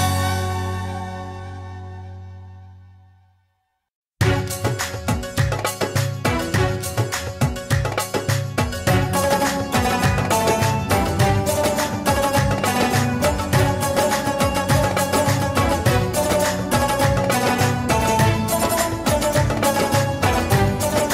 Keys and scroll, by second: 0.2 ctrl+a, 1.2-3.9 typing, 5.7 ctrl+s, 10.2 Delete.